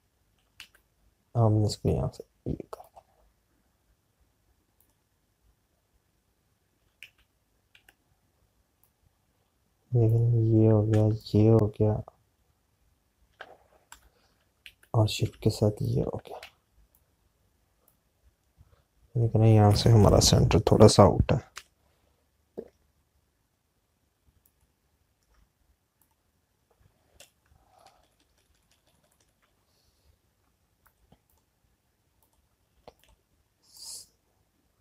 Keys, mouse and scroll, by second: 0.9 click, 1.6 z, 5.9 click, 8.0 z, 12.1 click, 14.8 Delete, 18.6 click, 25.3 alt+click, 31.7 click.